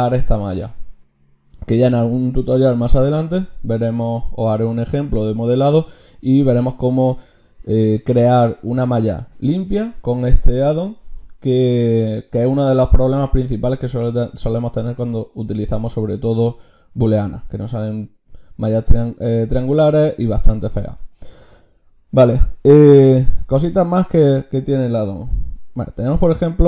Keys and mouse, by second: 25.2 ctrl+shift+q, 25.2-26.6 drag.